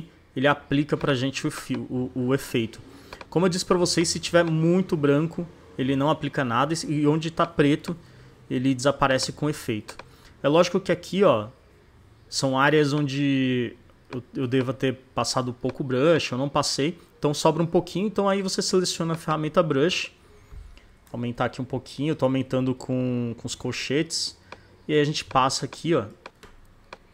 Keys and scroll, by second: 0.6 z, 3.8 space, 6.7 space, 12.4 space, 13.9 space, 15.4 space, 20.9 ], 23.5 [, 25.5 space.